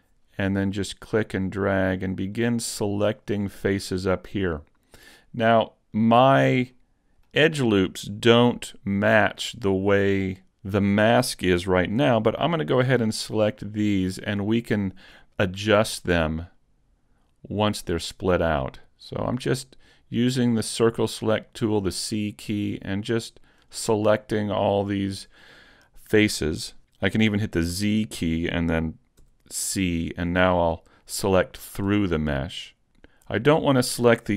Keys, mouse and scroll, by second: 0.1 c, 6.0 right click, 6.4-6.8 scroll up 2, 6.8 middle click, 7.5-7.9 scroll down 1, 7.9 shift+middle click, 8.7 middle click, 12.0 c, 24.0-24.4 scroll down 3, 24.4 middle click, 25.0-25.6 scroll up 1, 25.6-26.8 scroll down 1, 27.8 z, 29.2 c, 32.6 right click, 32.6 middle click, 32.6 scroll up 3, 32.6 z, 33.5 middle click.